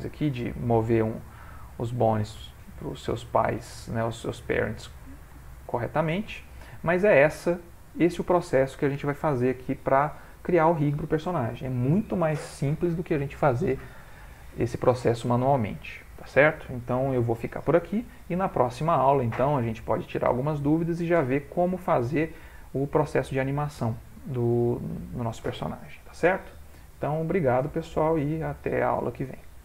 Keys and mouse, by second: 0.1 click, 1.0 g, 2.6 middle click, 2.8 ctrl+middle click, 3.2 middle click, 3.6 middle click, 3.8 ctrl+middle click, 4.1 ctrl+middle click, 4.5 middle click, 5.4 ctrl+middle click, 5.4 shift+middle click, 5.6 shift+middle click, 5.7 shift+middle click, 5.9 middle click, 7.2 shift+middle click, 7.4 shift+middle click, 7.7 middle click, 7.7 middle click.